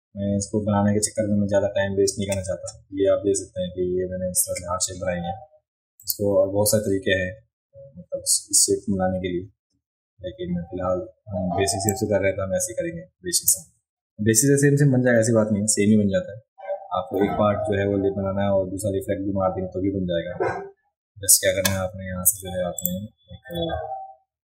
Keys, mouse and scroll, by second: 6.0 click, 11.9-13.5 drag, 22.8 click, 23.6 a.